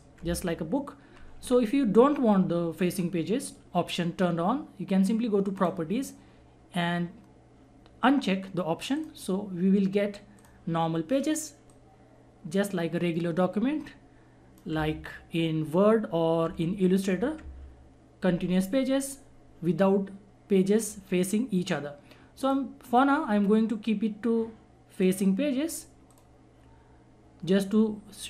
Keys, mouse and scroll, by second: 5.5 click, 8.9-17.1 drag, 22.4 click, 24.9 click.